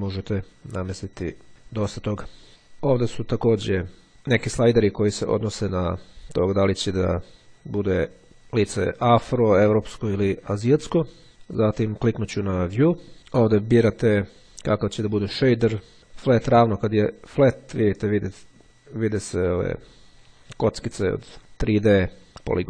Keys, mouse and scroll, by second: 1.2 click, 2.5 click, 6.0 click, 9.8 click, 10.6 click, 12.9 click, 14.1 click, 15.5 click, 21.4-22.6 drag.